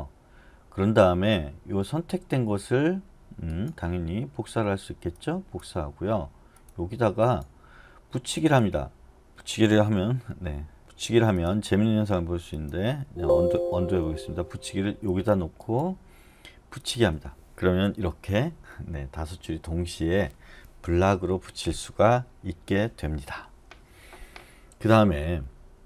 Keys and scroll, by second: 10.8 ctrl+z, 13.0 Escape, 13.8 u.